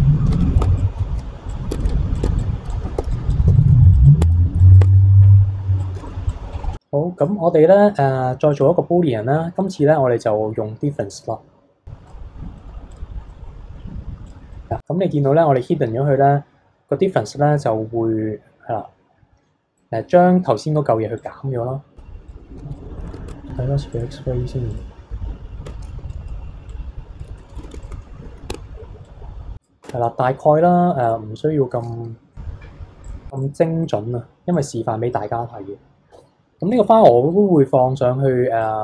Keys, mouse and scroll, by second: 0.3 p, 0.6 Tab, 0.8 click, 1.5 click, 1.7 Tab, 1.8 a, 1.9 e, 2.2 Tab, 2.5 scroll down 1, 2.7 click, 3.0 h, 3.3 click, 3.4 middle click, 3.5 h, 3.7 KP_1, 3.8 middle drag, 3.9 click, 4.2 Tab, 4.6 click, 4.8 Tab, 4.8 click, 4.9 middle click, 5.8 click, 6.1 middle click, 6.4 scroll down 11, 6.7-7.2 scroll up 7, 7.2-9.1 drag, 9.1-11.1 scroll down 13, 11.1 click, 12.6-12.9 middle drag, 12.9 click, 13.3-14.3 middle drag, 14.3 click, 14.5-17.3 middle drag, 19.7-21.1 middle drag, 21.1 click, 22.5 alt+h, 22.7 click, 22.8 KP_3, 23.0 middle click, 23.0 KP_1, 23.1 Tab, 23.2 scroll up 3, 23.3 Tab, 23.9 click, 25.7 Tab, 26.0 b, 26.7 click, 27.6 Tab, 27.8 shift+click, 28.5 Tab, 29.0 click, 29.8 Tab, 30.2-31.0 scroll down 2, 31.0 click, 33.0 click, 33.8-34.5 middle drag, 34.5 click, 34.9 scroll down 1, 35.1-36.1 middle drag, 36.1 h, 36.3 scroll up 2, 36.7 click, 38.6-38.8 drag.